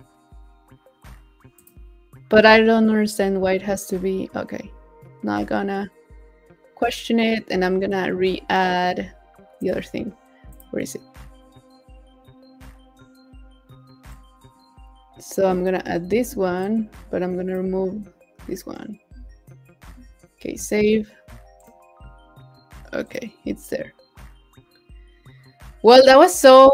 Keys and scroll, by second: 16.1 super+c, 19.6 super+s.